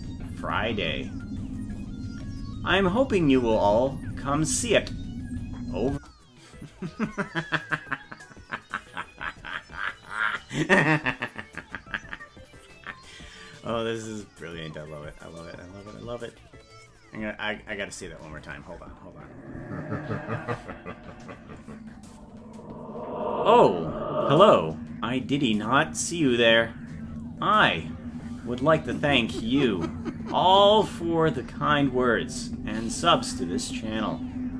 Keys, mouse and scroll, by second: 5.9 space, 16.7 click, 18.3 space.